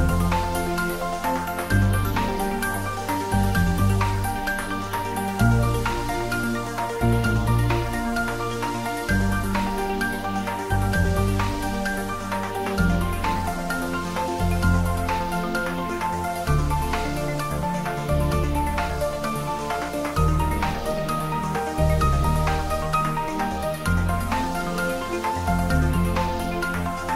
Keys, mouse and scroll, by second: 2.4 click, 4.1 click, 4.8 scroll down 1, 5.1-6.0 scroll up 1, 6.7 Tab, 7.8 s, 8.5 a, 9.4-9.8 scroll down 1, 12.6 s, 15.3 click, 18.2 scroll down 1, 19.5 s, 21.2 click, 25.2-25.8 scroll up 1.